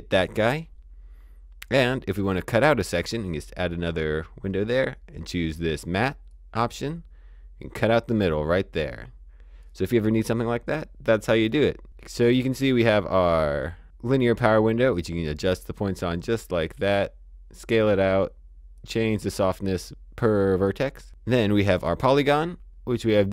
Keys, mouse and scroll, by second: 1.6 click, 5.7 click, 11.1 click, 21.5 click, 23.2 click.